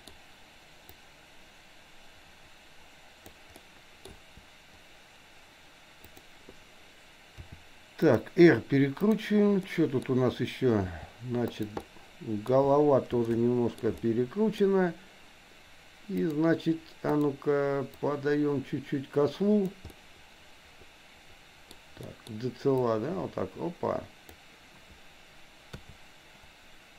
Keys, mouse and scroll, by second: 0.9-3.4 drag, 3.7 middle click, 4.1 KP_1, 5.9 click, 7.4 r, 9.1 click, 9.7 middle click, 10.8 r, 11.8 middle click, 13.2 middle click, 13.8 scroll down 1, 14.1 middle click, 16.3 click, 17.2 click, 17.9-19.8 drag, 19.9-21.8 middle drag, 22.1 scroll up 1, 22.2 middle click, 23.1-24.4 drag.